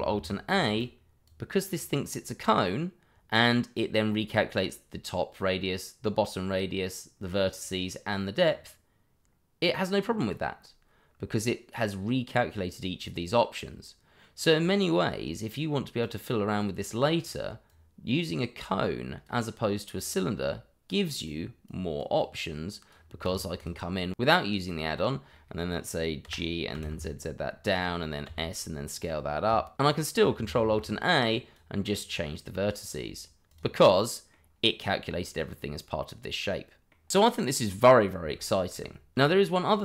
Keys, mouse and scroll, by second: 0.4 ctrl+alt+a, 1.2 click, 8.4 click, 16.0 click, 23.6 double click, 24.1 middle click, 24.5 Tab, 25.0 click, 25.1 middle click, 26.2 g, 26.7 z, 27.4 click, 27.9 s, 28.3 click, 28.7 Tab, 29.1 middle click, 30.6 ctrl+alt+a, 31.2 click, 33.9 middle click, 35.1 scroll down 1, 35.3 middle click, 38.7 Delete.